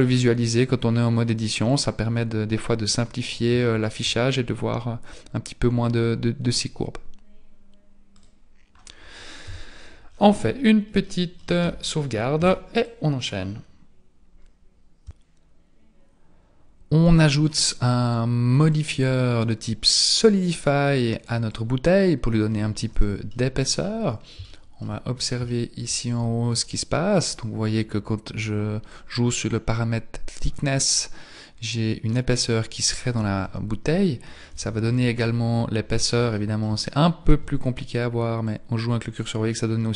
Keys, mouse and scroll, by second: 1.6 click, 3.6 shift+middle click, 8.1 click, 9.4 KP_1, 10.0 scroll down 7, 11.0 shift+middle click, 11.6 Tab, 12.4 ctrl+s, 18.6 click, 22.9 z, 23.4 middle click, 24.0-24.5 scroll up 5, 24.5 shift+middle click, 25.1-25.6 scroll up 2, 25.5 shift+middle click, 28.9 click, 33.4 KP_1, 34.5 z, 36.3 shift+middle click, 36.7-37.7 scroll down 3, 38.4 click.